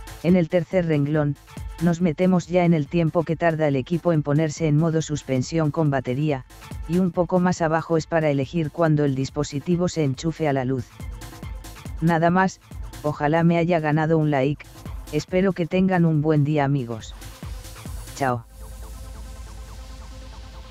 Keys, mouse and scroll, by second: 1.6 click, 6.6 click, 7.5 click, 8.7 click.